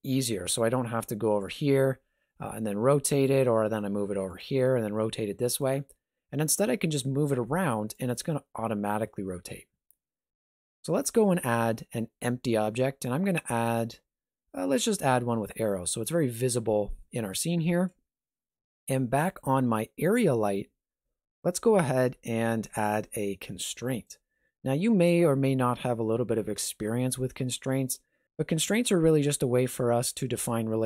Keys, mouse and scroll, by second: 0.5 g, 1.9 r, 3.6 g, 4.6 r, 6.5 g, 10.6-10.9 scroll up 1, 11.0 shift+a, 16.9 shift+middle click, 19.2 right click, 23.9 click.